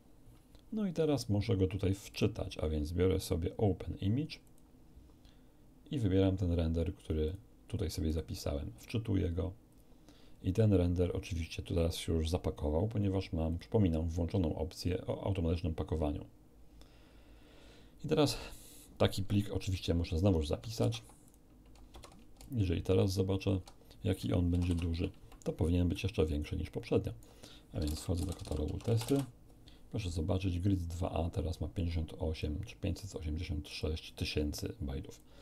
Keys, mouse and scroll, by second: 2.1 click, 4.4 click, 7.0 click, 8.0 click, 9.7 click, 13.5 click, 20.8 ctrl+s, 21.2 ctrl+click, 21.9 ctrl+alt+F1, 22.4 ctrl+alt+click, 24.6 ctrl+shift+=, 24.7 ctrl+shift+=, 25.9-27.4 alt+right drag, 27.8 alt+c, 27.8-29.0 typing, 28.6 Tab, 28.8 Return, 29.0 Return, 31.7 click, 33.6 click, 35.1 click.